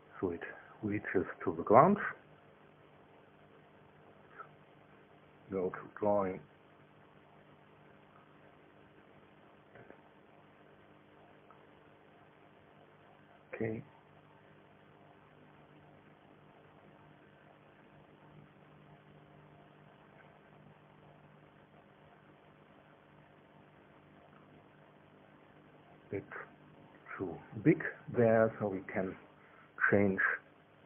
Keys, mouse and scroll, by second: 1.7 KP_4, 4.9-5.9 shift+middle drag, 6.2-8.0 shift+scroll up 1, 8.6 click, 12.6 KP_4, 17.0-19.9 drag, 22.4-27.9 drag, 28.5-29.0 scroll down 1, 29.0 right click, 29.9 click, 30.5-30.8 middle drag.